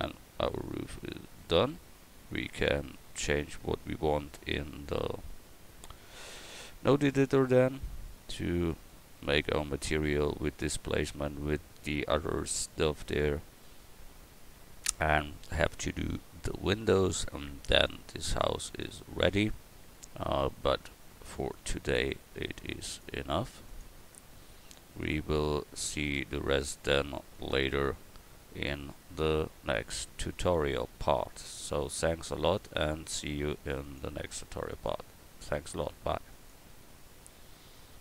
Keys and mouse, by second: 21.7-22.9 drag, 24.0-25.0 drag, 27.4-36.5 drag.